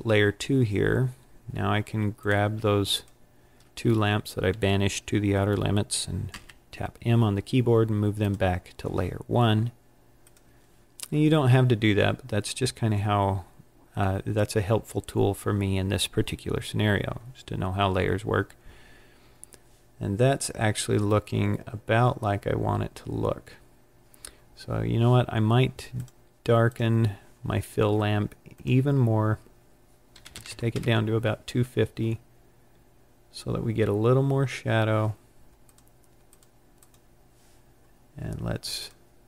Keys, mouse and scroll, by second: 0.3-2.1 scroll down 17, 2.1 click, 2.8 shift+click, 6.0 scroll down 10, 6.2 m, 8.1 m, 10.2 click, 13.2 scroll up 6, 14.3-15.0 scroll down 3, 15.0 scroll up 1, 15.9-16.7 scroll down 1, 25.8 click, 26.6 click, 28.4 click, 35.5 click, 36.3 click, 36.7 click, 38.7 click.